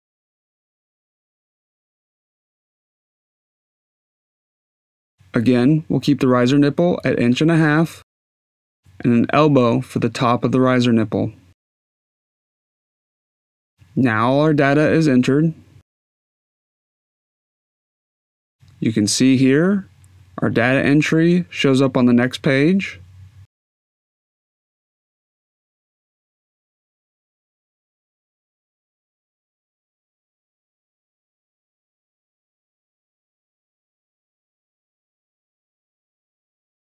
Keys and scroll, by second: 2.8-3.8 typing, 5.5 Tab, 6.5-8.0 typing, 8.5 Tab, 10.0 e.